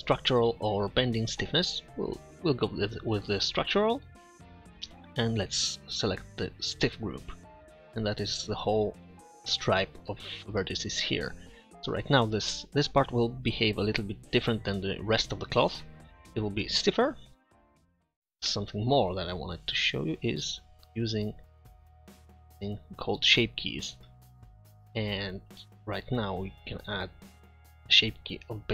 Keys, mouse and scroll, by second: 4.1-5.2 middle drag, 8.1-10.3 middle drag, 11.6-13.2 middle drag, 14.5-16.4 middle drag, 24.5 t, 24.5 n.